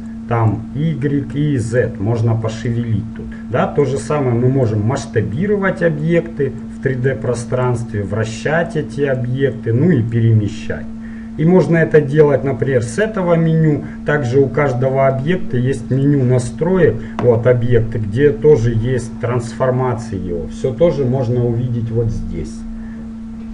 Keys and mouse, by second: 16.0-21.0 drag.